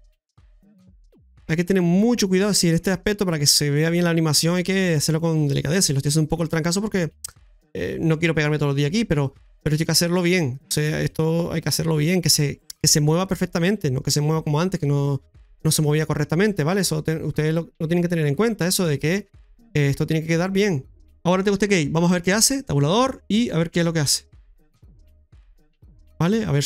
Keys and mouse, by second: 0.4 ctrl+z, 0.9 middle click, 1.7-2.4 typing, 1.9 right click, 2.8 right click, 3.5-5.3 typing, 4.8 right click, 5.2 middle click, 6.2-7.5 right drag, 7.3-10.8 typing, 8.1-9.2 right drag, 9.9 right click, 11.2-12.6 right drag, 13.3 right click, 15.0 middle click, 16.4 right click, 16.8-18.1 middle drag, 19.8-21.0 right drag, 20.8-21.5 typing, 22.3 Tab, 25.3 click.